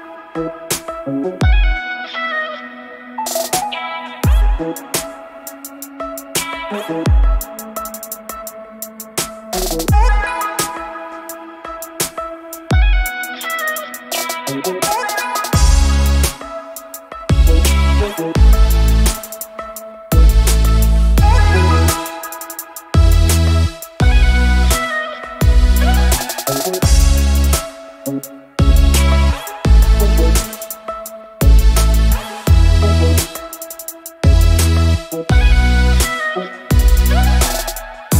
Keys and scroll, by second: 3.2 space, 17.4 ctrl+z, 17.7 ctrl+space, 23.0 space, 23.6 alt+space, 25.0 space, 25.9 space, 27.4 alt+space, 31.3 space, 32.2 alt+space.